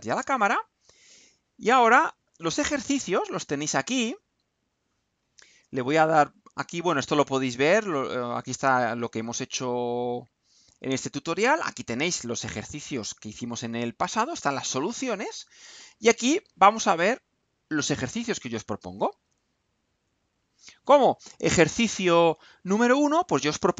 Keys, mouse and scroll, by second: 0.1 click, 17.7 click, 19.8-22.4 drag.